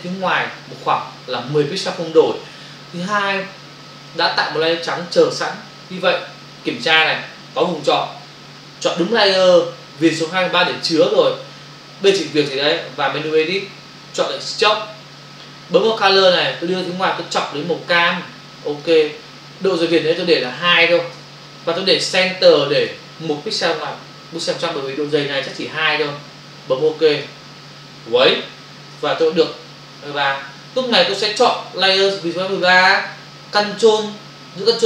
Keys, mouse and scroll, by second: 13.3 click, 16.1 click, 18.0 click, 20.2 click, 21.1 2, 22.8 click, 27.1 click, 32.5 click.